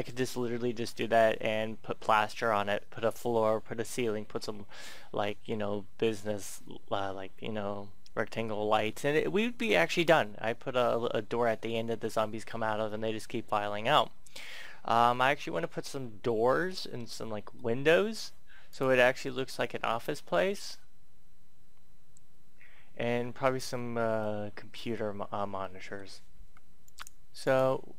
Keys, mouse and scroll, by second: 16.2 shift+middle click, 16.8 middle click, 18.6 click, 18.8-20.3 scroll down 1, 22.1 scroll down 1, 23.0-24.2 scroll up 1, 24.2 middle click, 25.0 scroll up 1, 25.7 shift+middle click, 26.7 right click.